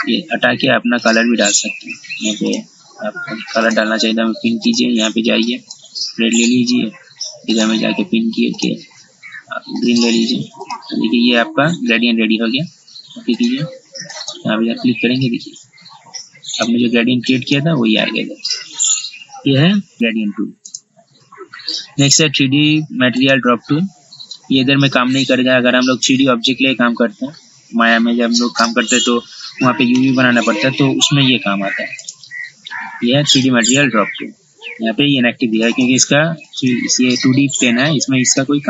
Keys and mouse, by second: 20.9 right click, 23.4 click, 26.2 click, 32.2 right click, 34.3 click.